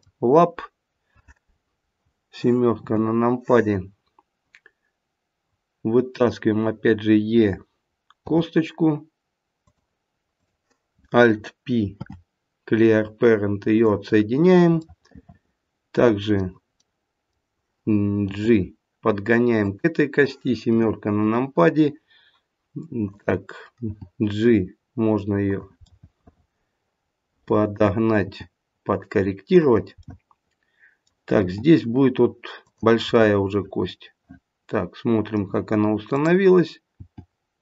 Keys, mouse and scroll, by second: 2.6 middle click, 2.7 KP_7, 6.1 click, 8.2 e, 10.4 click, 11.9 alt+p, 14.7 middle click, 16.9 middle click, 18.3 g, 20.6 KP_7, 23.0 click, 23.8 g, 25.8 middle click, 26.3 middle click, 28.2 g, 30.0 middle click, 33.1 g, 36.0 click, 36.9 g.